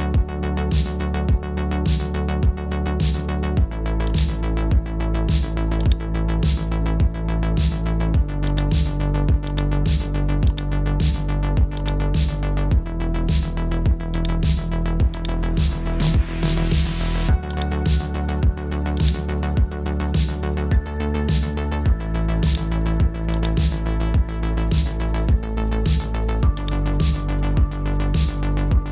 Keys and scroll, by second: 19.5 typing, 25.8 super+t, 28.8 Return.